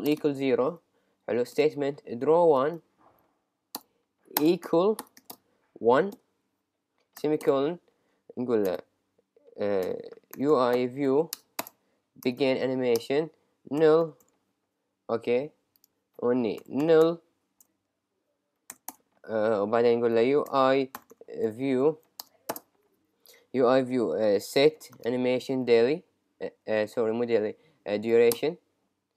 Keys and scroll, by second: 0.9 Down, 3.8 Return, 7.5 Return, 11.4 Return, 18.0 Right, 21.0 shift+u, 21.1 shift+i, 21.5 shift+v, 22.2 Return, 24.7 shift+s, 26.6 Down, 28.4 Return.